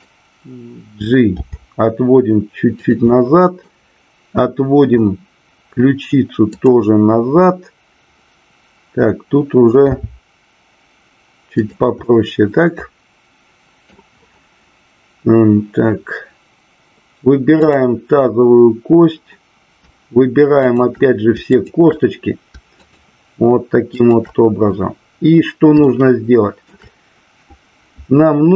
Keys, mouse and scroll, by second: 0.0 click, 3.1 middle click, 10.0 r, 11.6 click, 12.1-13.8 middle drag, 17.6-18.6 drag, 20.5-21.7 shift+drag, 22.8-23.4 shift+drag, 23.8-24.8 shift+drag, 25.8-26.7 shift+middle drag.